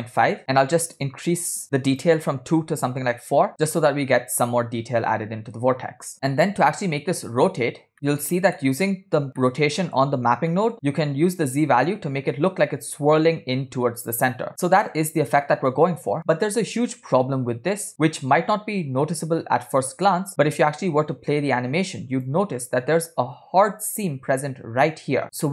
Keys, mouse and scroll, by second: 1.0 click, 2.0-3.2 drag, 5.1 scroll down 2, 7.9 click, 8.6 middle click, 9.6 middle click, 10.5 middle click, 10.9-22.4 drag, 23.0 scroll up 2.